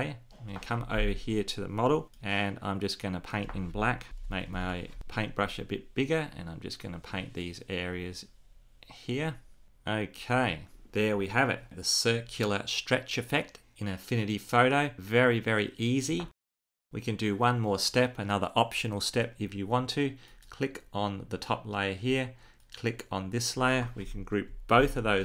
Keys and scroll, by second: 5.0 [, 24.4 super+g.